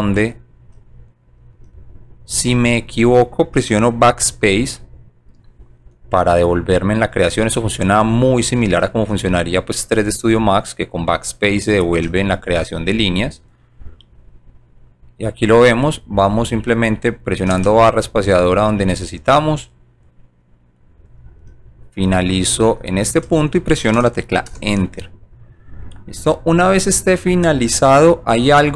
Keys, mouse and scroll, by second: 2.6 scroll up 1, 4.4 BackSpace, 8.7 space, 11.9 space, 12.5 right click, 13.0 scroll down 1, 13.5 right click, 15.8 click, 17.6 space, 18.6 right click, 19.2 right click, 20.0 right click, 21.0 right click, 23.2 space, 26.3 scroll up 2.